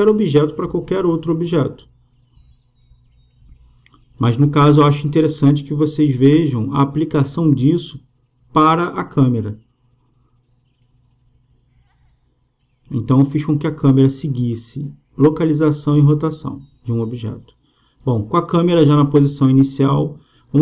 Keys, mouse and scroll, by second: 2.2-5.5 drag, 8.6-12.7 drag, 16.4-20.6 drag.